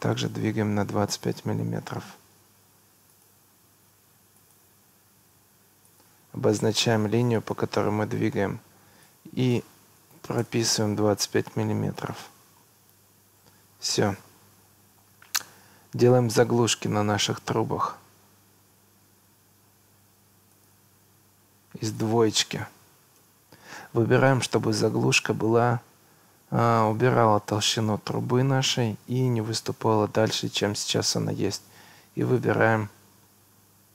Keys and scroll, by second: 1.9 Escape, 10.0 2, 10.2 5, 10.4 Return, 16.6 Escape, 23.2 2.